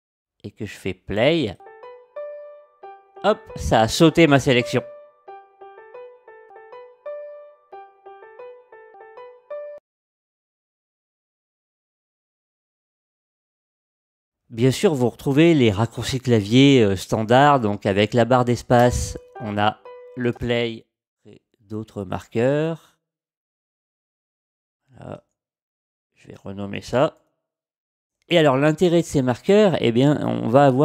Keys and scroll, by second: 18.8 space, 20.3 space, 25.8-28.0 typing, 28.1 Home.